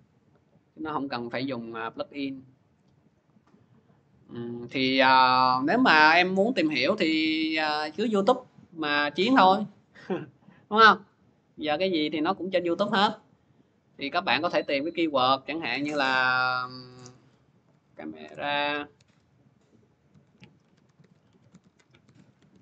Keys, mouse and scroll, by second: 8.1-10.5 drag, 11.6 click, 12.2 click, 13.2 click, 14.8 click, 16.5-19.3 typing, 20.3-22.6 typing.